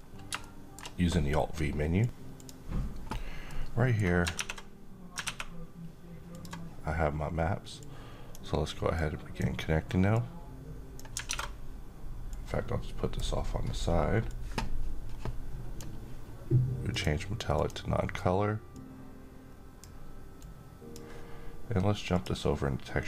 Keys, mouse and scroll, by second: 0.2-0.8 middle drag, 1.9-3.8 drag, 3.8 alt+Tab, 5.8-7.9 drag, 10.7 alt+Tab, 11.8-12.7 drag.